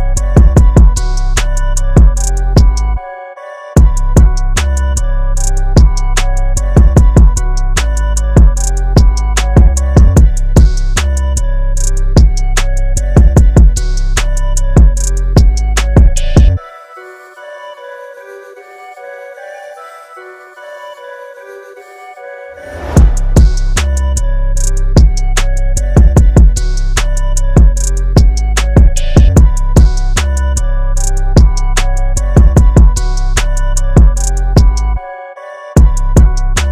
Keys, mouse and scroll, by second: 3.0 shift+click, 5.3 click, 5.8 space, 5.9 click, 6.1 space, 9.5 click, 11.4 click, 14.3 KP_9, 14.4 KP_5, 15.6 click, 16.3 KP_9, 16.5 KP_5, 19.6-20.2 scroll up 1, 20.8 click, 21.8-23.8 scroll up 1, 23.8-25.2 scroll down 1, 25.6-27.0 scroll up 1, 27.0-27.7 scroll down 1, 31.4 scroll up 1, 32.3 click, 32.8 scroll up 1.